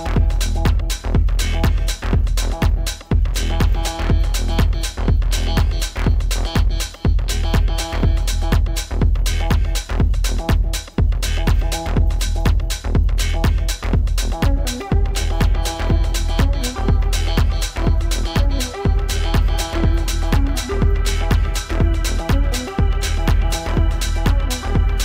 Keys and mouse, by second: 1.0 F1, 2.0 click, 2.9 alt+click, 4.0-6.6 alt+drag, 7.8-10.2 drag, 11.0 alt+click, 12.0 r, 13.3 click, 13.4 click, 14.5-15.6 alt+drag, 17.1 click, 19.4-24.2 shift+drag, 22.5 BackSpace, 22.7 BackSpace.